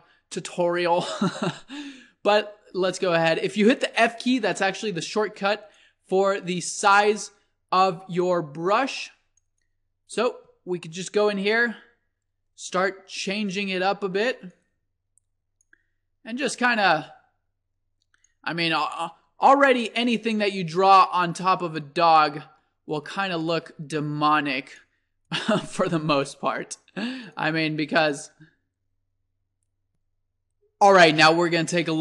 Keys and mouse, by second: 2.7 f, 5.8-8.4 drag, 9.6-11.4 drag, 13.4-18.3 drag, 19.0 click, 19.4-20.8 middle drag, 20.8-22.4 drag, 22.2 middle click, 23.0-24.5 middle drag, 24.5 click, 25.3-26.9 drag, 29.0 click, 31.9 click.